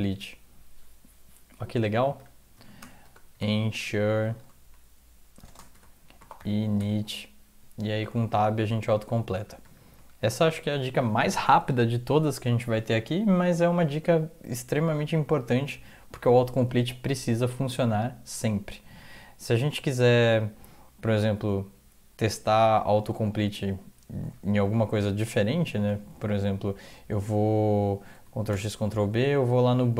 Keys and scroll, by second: 0.8-3.7 typing, 4.4 Return, 5.4-9.9 typing, 24.6 Return, 25.7 Return, 28.1 ctrl+x, 28.5 ctrl+b, 29.4 Down, 29.8 Down.